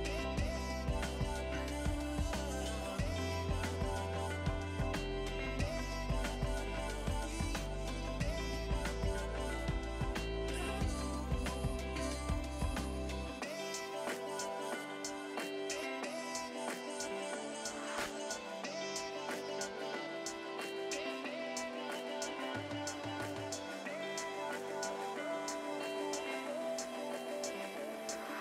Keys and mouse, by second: 3.4 click, 3.7 right click, 4.1 click, 5.6 ctrl+click, 9.4 click, 11.0 right click, 11.1 click, 13.0 click, 14.3-16.5 typing, 15.1 Return, 15.5 click, 16.5 click, 18.8 ctrl+click, 19.9 click, 21.7 ctrl+click, 27.0 ctrl+click.